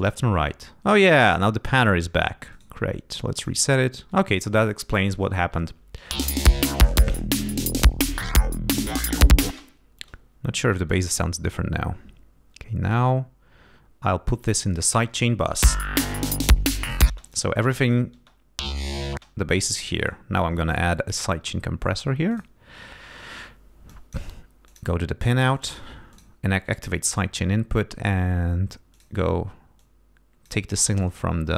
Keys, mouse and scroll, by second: 0.0 click, 1.2 middle click, 1.7 click, 2.5 middle click, 3.3 click, 6.1 space, 9.5 space, 12.8 click, 14.4 click, 15.6 l, 16.0-16.6 scroll up 1, 17.1 space, 17.2 click, 17.8 click, 18.1 space, 19.1 space, 20.0 right click, 22.3 click, 23.8 click, 24.7 click, 25.5 click, 26.1 click, 28.9 click, 29.7 click, 31.0-31.5 drag.